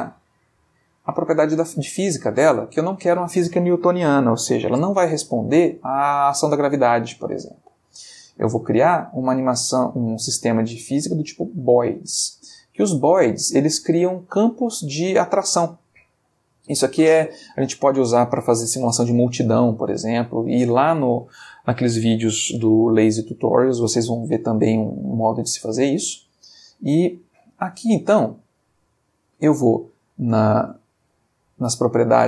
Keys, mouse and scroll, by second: 1.1 click, 7.2 click, 11.8 click, 13.4-14.0 shift+middle drag, 14.1-14.7 ctrl+shift+middle drag, 26.9-28.0 middle drag.